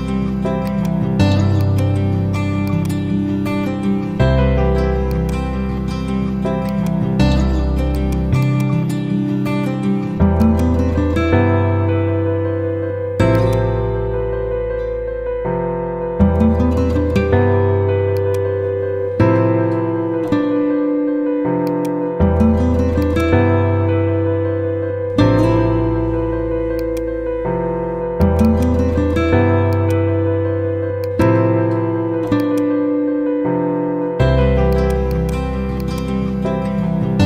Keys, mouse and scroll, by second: 0.6 click, 2.2 z, 2.6-3.5 drag, 6.2 F4, 6.6 click, 9.1 ctrl+c, 10.3 click, 11.1 F4, 12.1 ctrl+v, 13.2-17.6 drag, 17.6 z, 18.1-20.3 drag, 30.0 ctrl+a, 31.0 click, 33.5 ctrl+z, 34.6 click, 35.4 z, 35.7-37.2 drag.